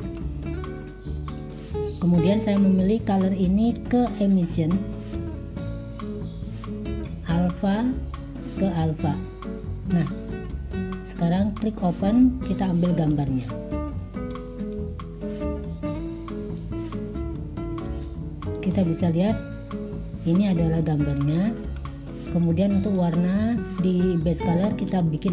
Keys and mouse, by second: 0.5 click, 1.6 click, 3.5-4.9 drag, 9.9 click, 11.6 click, 18.6-21.3 drag, 22.0 click, 22.8 click.